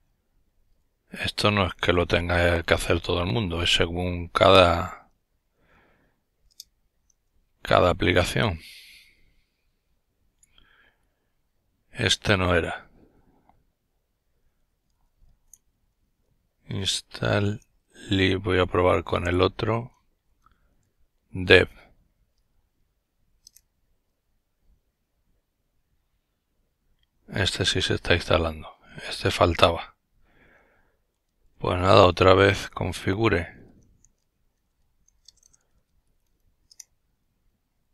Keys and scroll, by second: 0.0 typing, 1.8-2.9 typing, 4.2 typing, 6.0 Return, 7.4 typing, 13.9-20.8 typing, 23.3 Return, 31.6-36.2 typing.